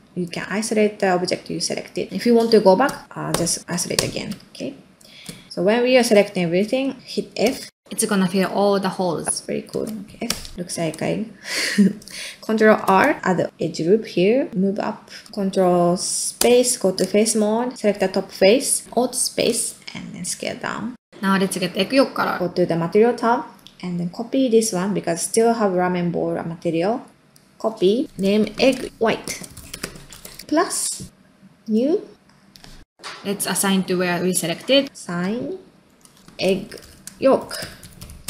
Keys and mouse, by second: 0.5-2.1 middle drag, 4.6 middle click, 5.5 middle click, 6.0 middle click, 6.6 ctrl+middle click, 7.9 middle click, 8.5 middle click, 9.7 ctrl+z, 10.0 middle click, 10.3 f, 10.5 middle click, 10.7 ctrl+middle click, 11.0 middle click, 12.0 middle click, 12.8 ctrl+r, 15.2 middle click, 16.4 ctrl+space, 19.5 alt+space, 28.2-30.4 shift+drag, 28.9 shift+g, 32.9-36.2 middle drag, 36.2-38.2 shift+drag, 37.1 g.